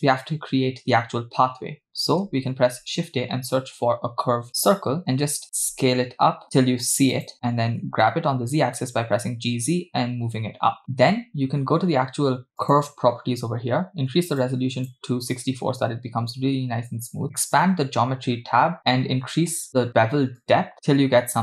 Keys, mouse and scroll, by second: 2.6 shift+a, 5.6 s, 7.9 g, 12.6 click, 14.4 click, 17.5 click, 18.0 scroll down 2, 20.4-21.4 drag.